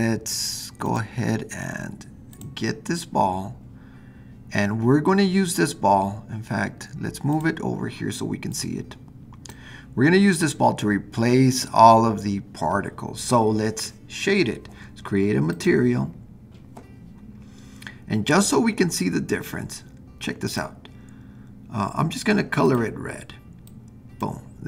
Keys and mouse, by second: 0.9 click, 2.3 click, 7.4 click, 8.5-9.5 drag, 15.5 click, 20.4 click.